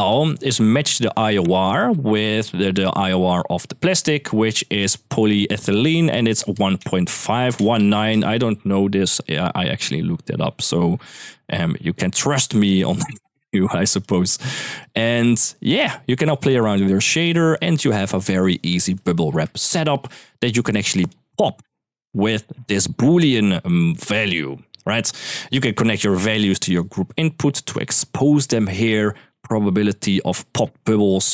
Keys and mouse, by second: 1.2-7.8 drag, 10.7 middle drag, 12.4 click, 12.8 click, 13.8 click, 14.6-17.7 drag, 18.2 right click, 18.6 ctrl+s, 20.2-20.9 drag, 21.5 middle click, 22.0 middle click, 22.9 middle click, 23.5 middle click, 25.8-26.7 drag, 27.5 click, 29.1-31.3 drag.